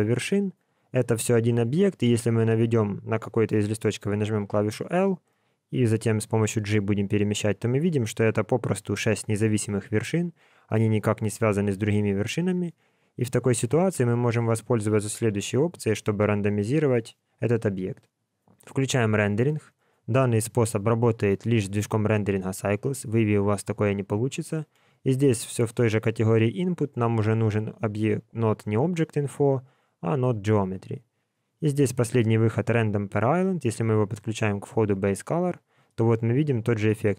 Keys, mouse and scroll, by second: 0.0 scroll down 1, 0.1 scroll up 1, 0.2 scroll down 1, 0.4 scroll up 1, 0.5 scroll down 1, 0.7 scroll up 1, 0.9-1.6 scroll down 3, 1.6 scroll up 1, 4.4 l, 6.1 g, 12.0-12.8 scroll down 4, 12.8-13.3 scroll down 1, 13.3 middle click, 13.8 alt+a, 14.2 Tab, 16.8 alt+a, 18.6 click, 25.1 shift+a, 33.4 click.